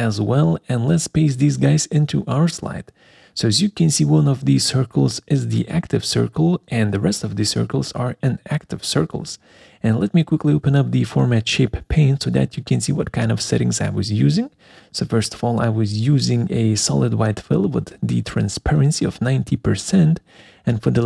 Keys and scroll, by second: 2.4 ctrl+v, 9.8 alt+4.